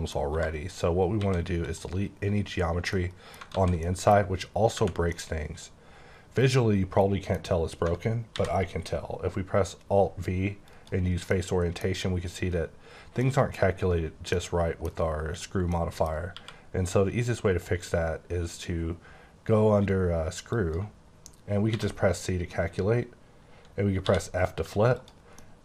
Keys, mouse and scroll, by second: 0.1 scroll up 1, 0.3 1, 0.7 click, 1.2 x, 1.6 click, 2.9 middle click, 3.3 scroll down 1, 3.5 z, 3.8 middle click, 4.7 Tab, 5.1 middle click, 8.3 alt+v, 10.7 click, 11.3 middle click, 13.6 scroll up 1, 13.8-14.3 scroll down 1, 14.3 middle click, 15.7 middle click, 20.5 click, 21.7 c, 24.1 f, 25.0 click, 25.4 middle click.